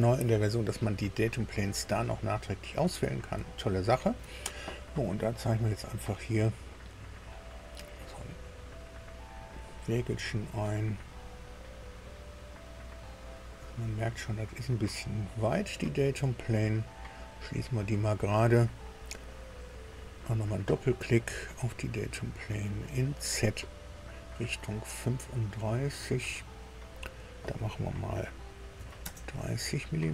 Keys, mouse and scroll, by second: 3.4 shift+click, 5.5 click, 7.5 click, 9.2 click, 10.3-15.9 middle drag, 17.1 click, 18.5 scroll down 1, 19.9 click, 22.6-24.1 drag, 26.8 click, 28.7 KP_3, 29.0 KP_0.